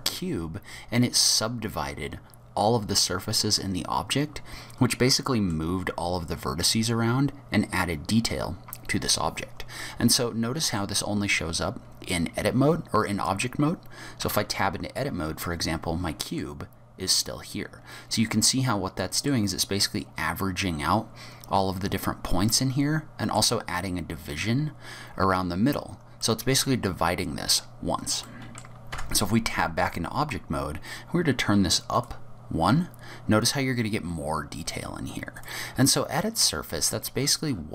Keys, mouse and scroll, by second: 1.3 middle click, 9.8 middle click, 14.3 Tab, 15.0 middle click, 17.1 middle click, 22.5 middle click, 26.2 middle click, 28.3 middle click, 28.9 Tab, 29.5-31.3 scroll up 4, 31.9 click, 35.4 click, 36.0-37.7 scroll down 35.